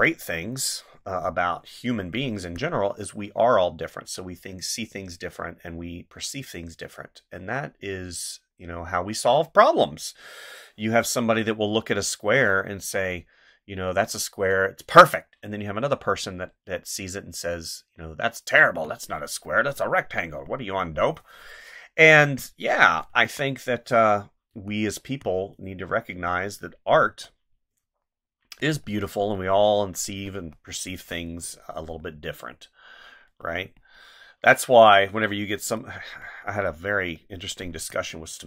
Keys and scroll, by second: 2.4 space, 18.5 space, 20.6 space, 23.1 space, 24.5 space, 27.0 space, 30.4 space, 33.6 space, 37.7 space.